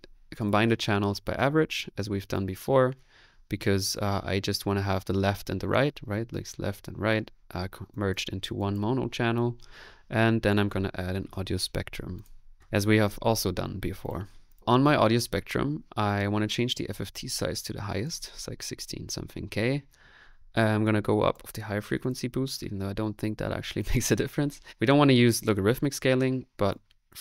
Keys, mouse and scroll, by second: 0.5 click, 4.5 space, 10.9-13.1 typing, 14.6 typing, 15.6 middle click, 16.0 click, 16.7 click, 18.1 click, 20.9 click, 22.0 click, 23.1 middle click, 23.8 click.